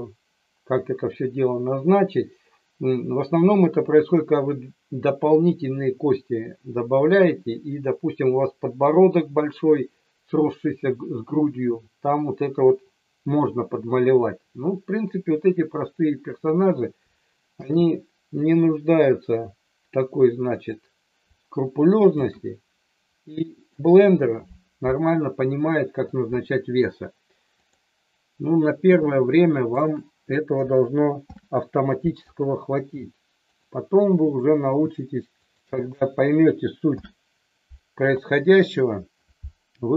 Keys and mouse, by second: 17.6 shift+d, 22.2 shift+d, 23.6 click, 27.6 click, 29.8 shift+click, 31.3 ctrl+p, 35.5 shift+click, 36.8 ctrl+p.